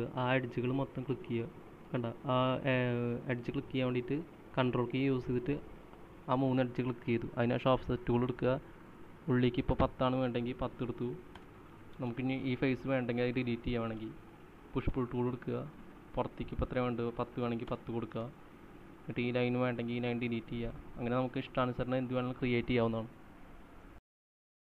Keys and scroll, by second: 6.6-7.3 typing, 11.4-13.7 typing, 14.7 Delete, 15.2-16.1 typing, 18.0-19.4 typing, 20.5-23.1 typing.